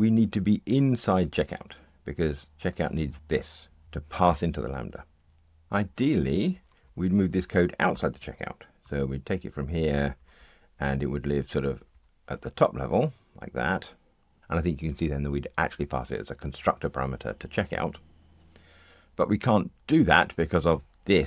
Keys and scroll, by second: 8.8 super+x.